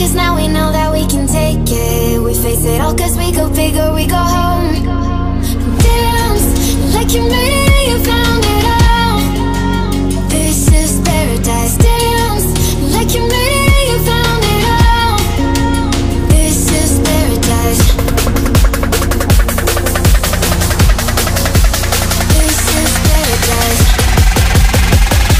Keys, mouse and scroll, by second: 0.5 click, 4.3 click, 6.1-11.7 drag, 11.7-20.0 drag, 20.0 click, 24.9-25.3 shift+drag.